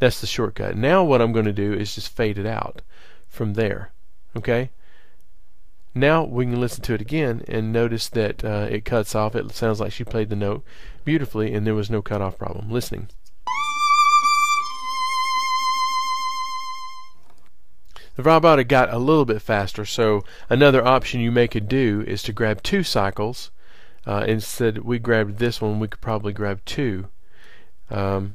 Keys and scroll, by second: 7.4 super+[, 20.1 super+], 21.4 super+[.